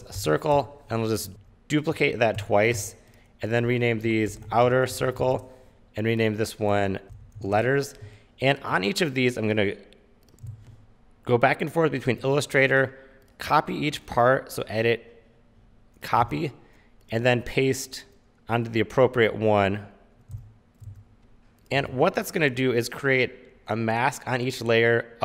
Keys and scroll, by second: 0.0-0.6 typing, 0.7 Return, 1.3 super+z, 2.5 super+d, 4.2-5.6 typing, 6.9-8.1 typing, 10.4 shift+super+y, 10.6 super+Tab, 16.5 super+Tab, 21.1 super+Tab.